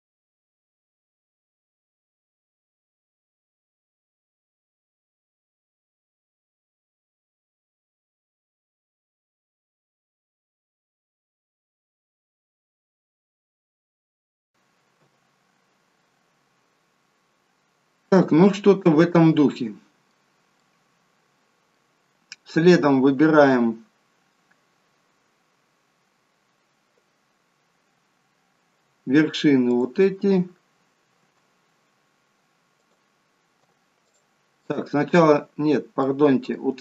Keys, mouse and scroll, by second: 0.0 shift+middle click, 0.8 click, 0.8 scroll up 2, 1.0 shift+click, 1.1 shift+click, 1.3 click, 1.5 f, 1.7 click, 1.9 shift+click, 2.1 shift+click, 2.2 shift+click, 2.6 f, 2.8 click, 3.0 shift+click, 3.1 shift+click, 3.3 shift+click, 3.5 f, 3.7 click, 3.9 shift+click, 4.0 shift+click, 4.2 shift+click, 4.3 f, 4.6 click, 4.9 shift+click, 5.0 shift+click, 5.2 shift+click, 6.2 click, 6.2 f, 6.4 shift+click, 6.6 shift+click, 6.8 shift+click, 7.1 f, 7.3 click, 7.5 shift+click, 7.6 shift+click, 7.7 shift+click, 8.0 f, 8.9 click, 9.4 shift+click, 9.5 shift+click, 9.6 shift+click, 9.9 f, 10.1 click, 10.3 shift+click, 10.5 click, 11.1 shift+click, 11.3 shift+click, 11.5 f, 11.8 click, 12.0 shift+click, 12.1 click, 12.3 shift+click, 12.5 d, 12.8 f, 13.2 click, 13.4 shift+click, 13.6 shift+click, 13.7 shift+click, 13.9 f, 14.1 click, 14.2 click, 14.3 shift+click, 15.0 f, 16.8-18.0 scroll down 1, 18.2 middle click, 20.6 middle click, 23.8 scroll down 2, 29.7 shift+click, 34.1 click, 34.7 middle click, 35.7-36.1 scroll up 2, 36.1 middle click.